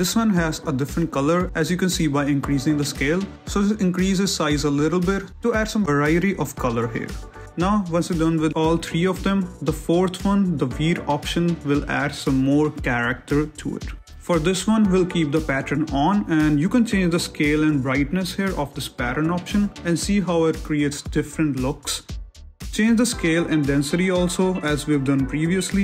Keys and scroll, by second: 0.5 shift+z, 2.6 ctrl+z, 18.8 shift+Up, 20.0 z, 25.7 shift+z.